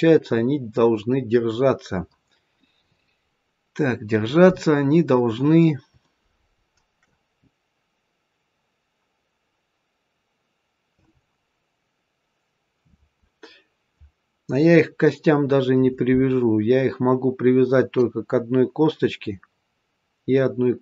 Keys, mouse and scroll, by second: 3.7-5.2 scroll down 1, 5.9 shift+middle click, 5.9 shift+scroll down 1, 7.3-8.6 scroll up 1, 8.6 scroll down 1.